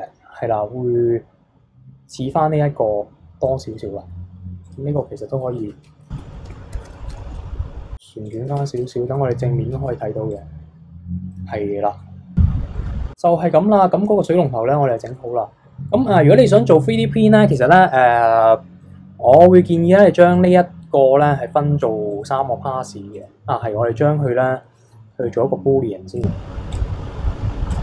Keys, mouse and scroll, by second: 3.5-4.6 middle drag, 4.6 click, 5.6 Tab, 6.1 KP_3, 6.7 ctrl+KP_1, 7.3 r, 8.5 Tab, 8.8 middle click, 9.1 KP_1, 9.7 KP_3, 10.3 click, 11.3-13.3 middle drag, 13.3-13.9 scroll down 2, 13.9 scroll up 1, 15.0-18.1 middle drag, 18.1-18.8 scroll up 1, 18.8-20.3 middle drag, 20.3 click, 22.1 click, 23.1 click, 26.2 click, 26.7-27.8 drag.